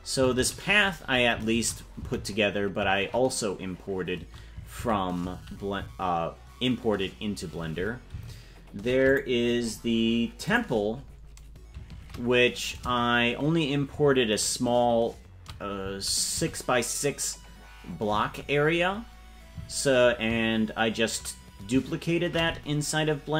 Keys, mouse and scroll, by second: 3.8 shift+middle click, 10.6 click, 11.9 shift+`.